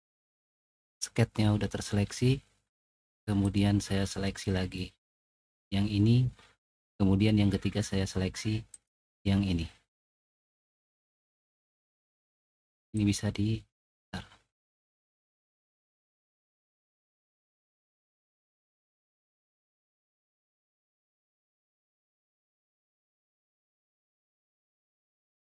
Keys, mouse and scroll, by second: 3.4 click, 5.1 click, 12.9-13.8 drag, 15.8 click, 19.6 click, 20.1 click, 21.3-23.0 drag, 24.8 click.